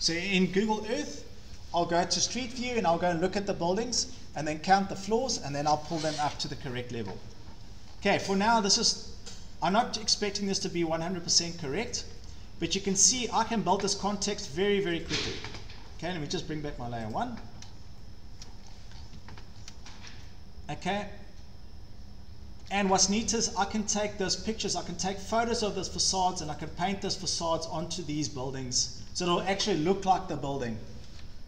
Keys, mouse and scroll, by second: 0.2 scroll, 6.6 Escape, 7.9-8.5 scroll down 5, 8.5 click, 9.9 click, 11.0 scroll, 11.9 click, 12.8-13.3 scroll, 13.3 scroll down 9, 13.5 Escape, 13.7 Escape, 14.1 scroll down 1, 14.7 Escape, 15.0 click, 15.2 click, 16.1 scroll, 17.1 click, 17.7 scroll down 6, 18.5 shift+middle click, 18.6-19.2 scroll, 19.2 Escape, 19.3 scroll up 11, 19.4 Escape, 19.6 scroll down 1, 19.9 scroll up 2, 20.0 scroll down 8, 20.8 scroll up 1, 22.8 click, 23.0 shift+middle click, 23.1 middle click, 23.2 Escape, 24.7 click, 25.5 scroll, 26.5 click, 26.6 click, 27.2 click, 28.0 right click, 29.0 Escape, 31.3-31.4 scroll up 1.